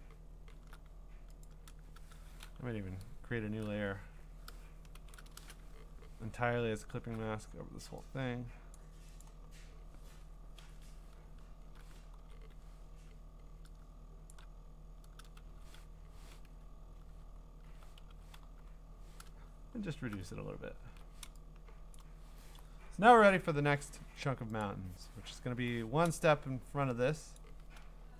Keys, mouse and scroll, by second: 1.4 click, 4.7 click, 4.9 ctrl+shift+n, 5.4 Return, 6.4 scroll down 2, 7.1-7.7 scroll up 2, 7.7-8.8 scroll down 1, 8.8 click, 9.0 scroll, 9.2 click, 9.5-10.5 scroll, 10.6 ctrl+], 11.4-12.2 scroll, 12.2 g, 14.3 shift+click, 15.5 v, 17.3 scroll, 17.9-18.9 typing, 19.5-20.3 scroll, 20.4 scroll, 22.0 click, 24.6 click, 25.0 middle click, 25.1 middle click, 27.4 click.